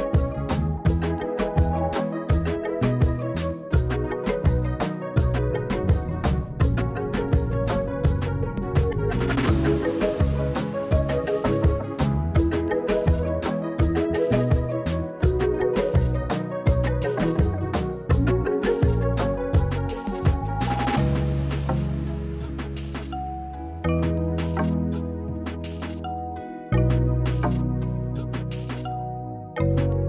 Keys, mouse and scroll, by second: 0.2 click, 0.9 click, 2.0 click, 2.5 click, 2.6 click, 3.8 e, 3.9 Escape, 4.1 s, 6.0 click, 7.1 KP_1, 9.0 z, 10.3 click, 11.1 e, 11.3 Escape, 12.2 g, 12.4 z, 12.8 click, 13.0 s, 15.5 click, 15.9 click, 17.7 click, 18.2 alt+click, 18.9 z, 21.7 click, 22.3 middle click, 23.5 click, 24.5 Escape, 24.7 s, 26.0 click, 26.3 KP_1, 29.1 z.